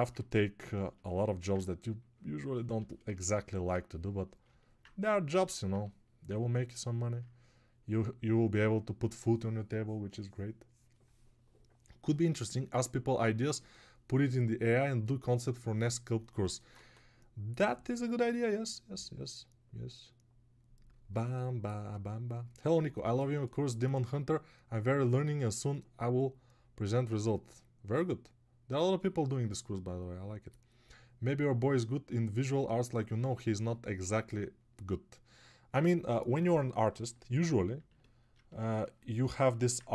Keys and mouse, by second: 0.8-5.5 ctrl+alt+drag, 0.8-5.5 ctrl+alt+right drag.